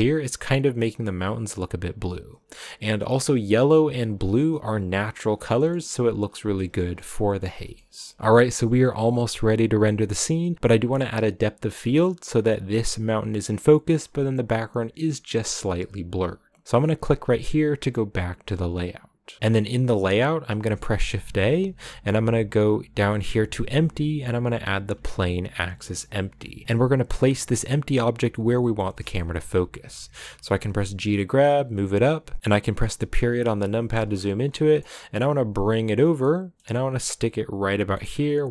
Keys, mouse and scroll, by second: 3.0 click, 4.1 click, 5.6 middle click, 6.1 scroll down 2, 6.9-19.7 shift+middle drag, 19.7-20.5 scroll up 1, 26.6 g, 27.8-28.7 scroll up 1, 28.7 middle click, 29.5-30.6 scroll up 2, 30.6 g, 32.4 middle click, 32.9 KP_Decimal, 34.0-34.4 scroll down 9, 34.4 middle click, 35.2 g, 36.1 middle click, 36.6 g, 37.8 middle click, 38.0-38.5 scroll up 4.